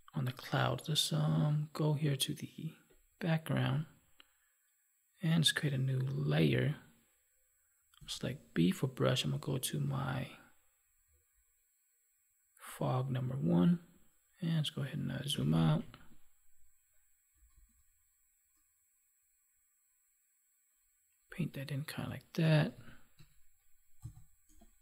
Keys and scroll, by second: 15.2 ctrl+-, 22.3 ctrl+=.